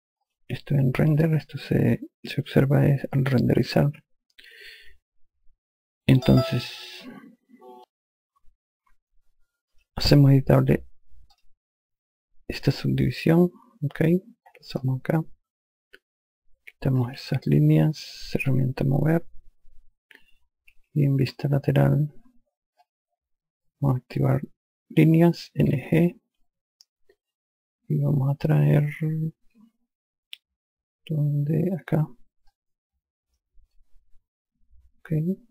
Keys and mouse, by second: 0.6 click, 10.0 click, 11.6 click, 15.1 click, 17.0-18.8 typing, 21.1 F3, 26.0 n, 26.7 g, 32.8 click.